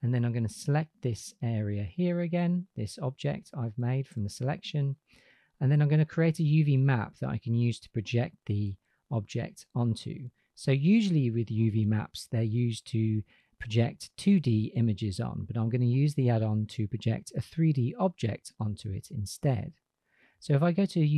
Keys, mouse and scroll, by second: 0.0 drag, 9.3 click, 10.1 drag.